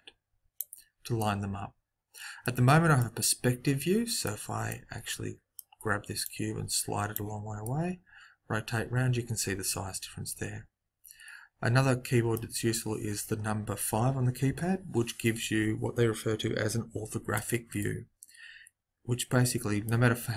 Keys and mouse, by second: 1.1 middle click, 6.2 click, 6.2 middle click, 6.7 click, 7.6 middle click, 9.4 click, 14.4 KP_5, 17.7-19.7 middle drag.